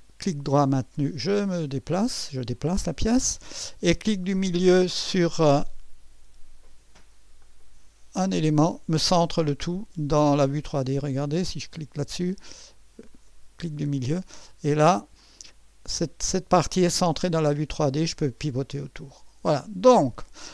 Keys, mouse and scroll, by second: 4.5 right click, 7.4 middle click, 13.1 middle click, 14.0-16.8 drag, 16.9-19.8 drag, 20.0 right click.